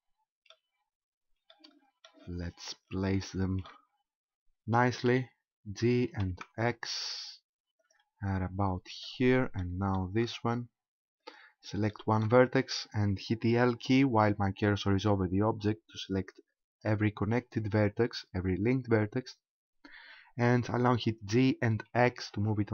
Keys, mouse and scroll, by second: 1.5 shift+middle click, 2.4 scroll up 4, 3.1 shift+middle click, 5.1 g, 7.9 ctrl+click, 8.2-9.1 scroll down 4, 9.1 shift+middle click, 10.1 shift+middle click, 11.3 right click, 11.9 shift+middle click, 12.3-12.8 scroll up 2, 15.5 l, 16.7-17.1 scroll up 2, 21.3 g.